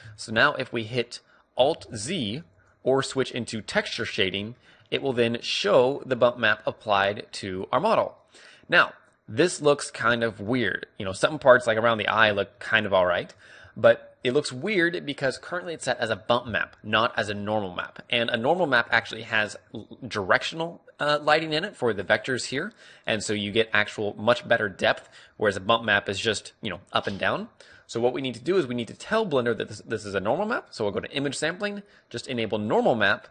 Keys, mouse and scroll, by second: 3.4 alt+z, 3.4-5.4 drag, 5.4-9.2 middle drag, 9.3-10.9 right drag, 10.9-13.0 middle drag, 13.3-15.0 middle drag.